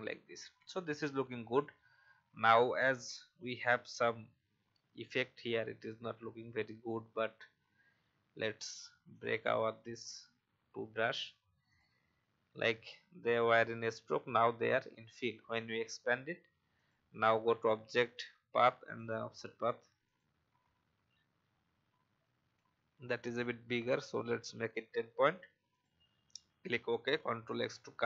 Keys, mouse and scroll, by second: 23.0 shift+scroll down 1, 25.7 click, 27.5 ctrl+x.